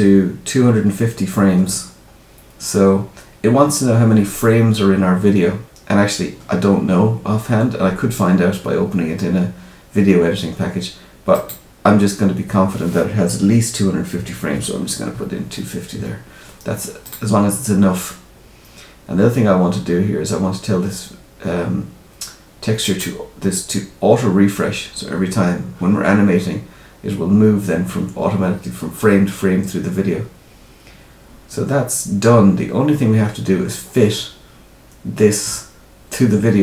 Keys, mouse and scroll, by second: 11.3 click, 22.7 click.